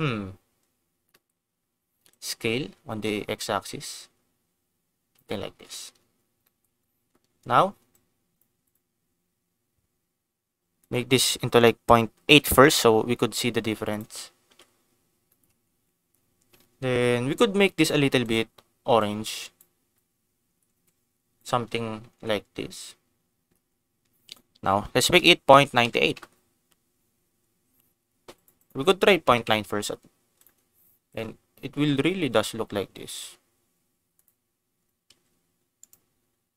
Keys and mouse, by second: 1.2 middle click, 2.0-5.2 shift+drag, 5.6 ctrl+s, 6.4 click, 7.9 click, 8.7 click, 10.8-13.4 drag, 13.9 click, 14.4 ctrl+s, 15.2 shift+middle click, 17.8 click, 18.2 click, 20.5 ctrl+s, 21.3 click, 22.1 ctrl+s, 24.2-26.9 drag, 28.4-30.2 drag, 31.0 ctrl+s, 34.2 click, 35.0 g, 35.8 click.